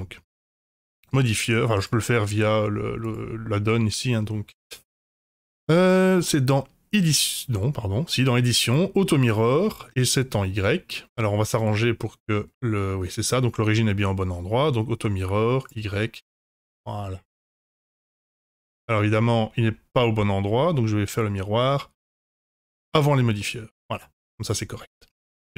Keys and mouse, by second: 0.8-1.7 drag, 3.0 click, 4.7 n, 8.7 click, 11.2-11.8 middle drag, 13.0 middle drag, 14.0 middle drag, 15.6 click, 17.7 click, 17.7-19.1 middle drag, 21.1-22.1 drag, 23.0 click, 23.3-25.1 middle drag, 25.4 middle drag.